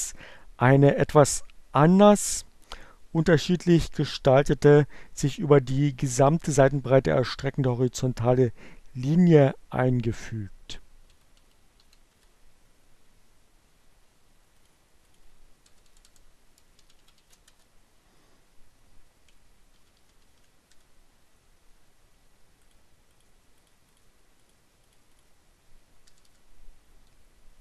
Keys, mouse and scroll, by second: 8.8 -, 11.4 space, 14.3 click, 15.0 BackSpace, 16.6 shift+-, 16.8 shift+Return, 19.0 shift+0, 19.2 shift+Return, 21.5 click, 22.7 click, 24.0 click, 24.6 click, 25.9 BackSpace.